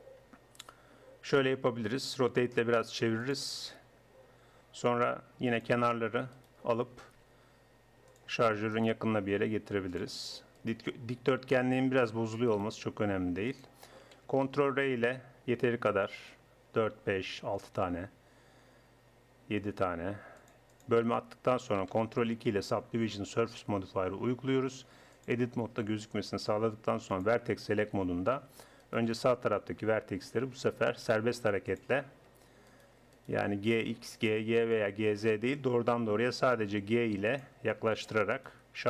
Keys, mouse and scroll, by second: 2.1 r, 5.5 click, 6.4 middle click, 7.3-8.3 drag, 7.3 g, 8.9 right click, 8.9 g, 10.8 g, 12.6-14.4 drag, 12.7 g, 14.6 ctrl+r, 22.1 ctrl+2, 25.2-28.6 drag, 27.9 a, 30.3 g, 32.7 click, 36.2 click, 36.2 g, 38.0-38.8 drag.